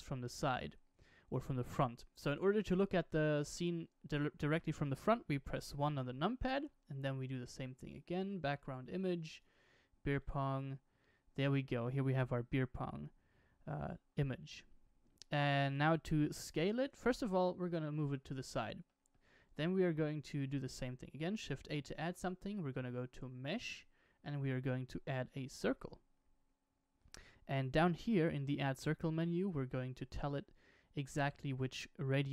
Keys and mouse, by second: 0.3-1.3 middle drag, 3.4-4.7 middle drag, 5.3 KP_1, 6.5 shift+a, 17.0 g, 18.8 middle click, 19.3 shift+a.